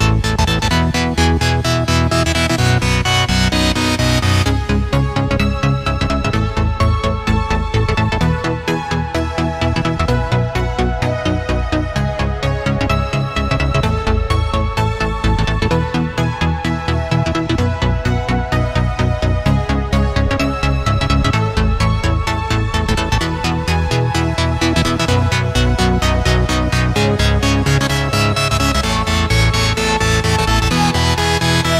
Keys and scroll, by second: 0.4 shift+super+[, 0.8 super+], 2.3 space, 2.8 space, 2.9 space, 6.0-6.8 space, 7.3 v, 12.1 space, 21.5 Delete, 22.6 p, 30.8 v.